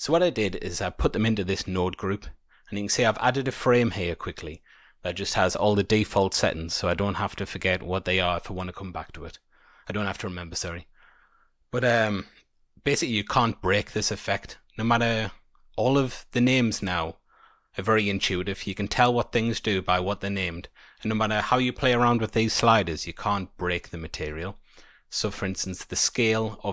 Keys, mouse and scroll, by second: 0.4 middle click, 9.5-12.6 scroll up 1, 14.3-14.8 scroll up 3, 15.4 scroll down 2, 24.0 middle click, 25.2-26.0 scroll up 2, 26.0 click.